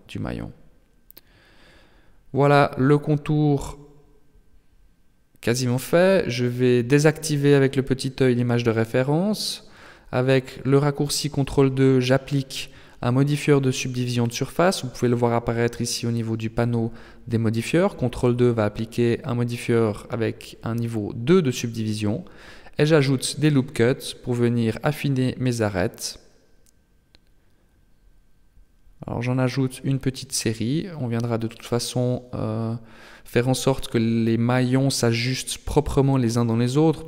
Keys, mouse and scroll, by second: 0.8 Tab, 1.9 z, 2.6 n, 6.1 scroll down 3, 7.6 click, 11.2 ctrl+2, 12.4 shift+space, 14.2 click, 19.3 n, 20.0 Tab, 21.0-22.5 scroll up 1, 22.5 scroll up 1, 22.7 ctrl+r, 25.6 ctrl+r, 30.8 Tab, 33.6 Tab, 36.2 ctrl+r.